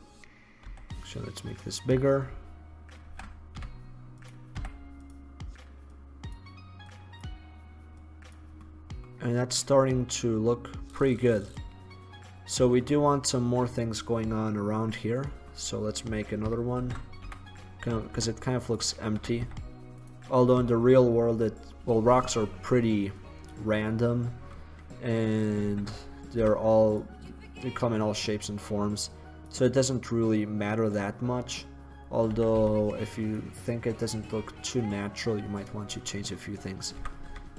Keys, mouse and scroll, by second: 0.7 s, 3.3 shift+d, 4.5 click, 4.7 s, 8.9-9.5 middle drag, 9.7 middle drag, 9.9-12.1 middle drag, 13.2 middle click, 13.3-15.3 middle drag, 15.3-16.9 right drag, 16.9 shift+d, 18.8-19.3 drag, 19.3 s, 23.3-25.7 middle drag, 25.7 shift+d, 27.1 click, 31.4-32.3 middle drag, 32.5 s, 35.0-35.5 middle drag, 35.7-37.1 middle drag, 37.1 r.